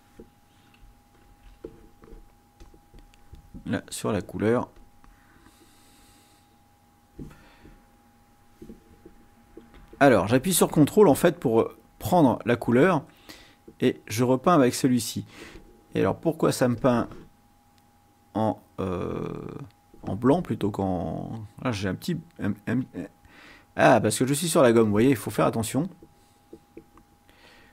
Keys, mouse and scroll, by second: 1.2 ctrl+shift+a, 2.6 click, 4.6 ctrl+click, 6.1 click, 9.7 x, 10.9 ctrl+click, 12.0 ctrl+click, 13.4-15.6 drag, 16.9 click, 23.6 click, 25.7-27.7 drag.